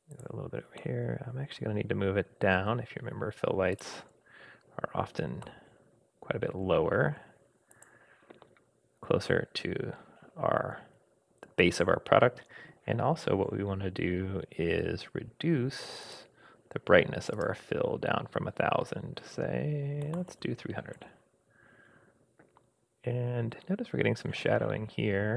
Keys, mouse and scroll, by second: 0.8-3.6 middle drag, 3.7 click, 5.4 g, 16.0 click, 17.3-21.1 drag, 20.3 0, 21.8-22.6 scroll up 3, 22.6 scroll down 1, 23.1-23.5 scroll down 1, 23.5-24.5 scroll up 2.